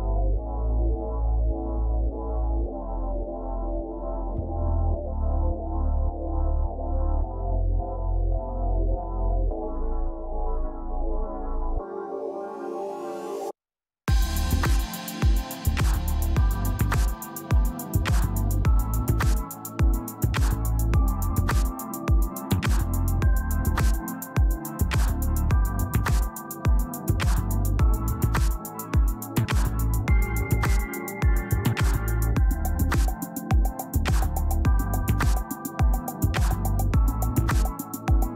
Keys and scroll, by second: 22.6 space, 27.7 ctrl+space, 28.1 ctrl+space, 35.6 ctrl+alt+d, 38.2 ctrl+alt+z.